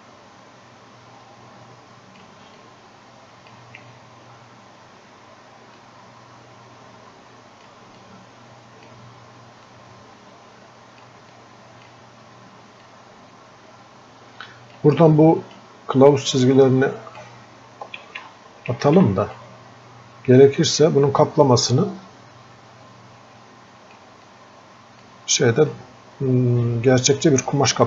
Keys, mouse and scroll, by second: 24.4-27.8 drag.